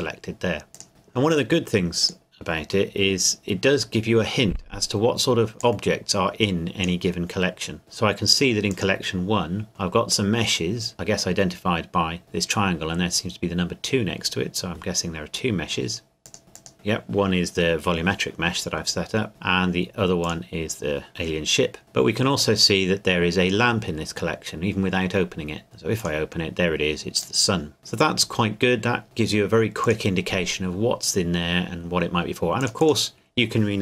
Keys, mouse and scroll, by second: 0.7 click, 2.0 click, 5.6 click, 8.7 click, 16.2 click, 20.2 click, 22.4 click, 26.0 click, 29.8 click, 32.6 click.